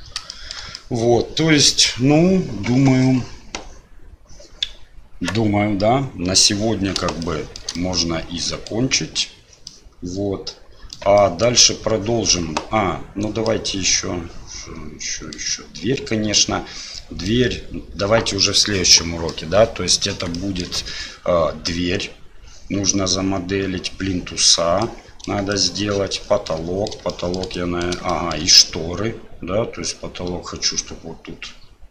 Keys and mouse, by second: 0.3 shift+middle drag, 0.8-1.4 middle drag, 7.3-7.6 shift+middle drag, 7.8-8.7 middle drag, 9.8-11.0 middle drag, 11.3 shift+middle click, 13.6-15.4 middle drag, 16.3-17.3 middle drag, 19.4-19.9 middle drag, 20.4 shift+middle drag, 24.9-25.3 middle drag, 25.5 shift+middle drag, 26.5-26.9 middle drag, 27.1 shift+middle drag, 27.7 middle click, 28.2 shift+middle click.